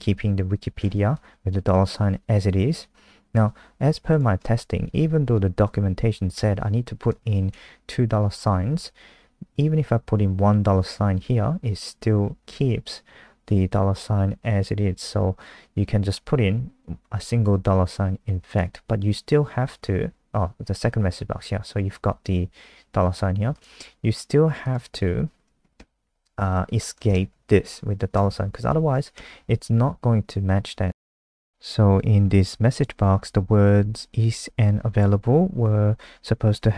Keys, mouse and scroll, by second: 4.8 Right, 6.3 BackSpace, 7.5 ctrl+s, 7.8 F5, 18.4 click, 25.7 shift+Left, 26.7 Left, 27.8 Right, 28.1 BackSpace, 28.7 ctrl+s, 29.1 F5, 31.4 click, 35.6 super+click.